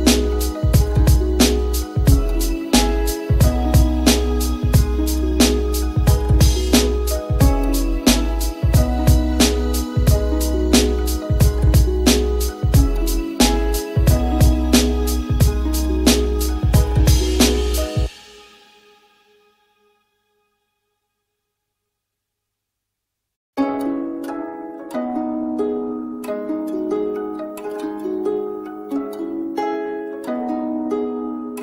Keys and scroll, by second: 15.3 ].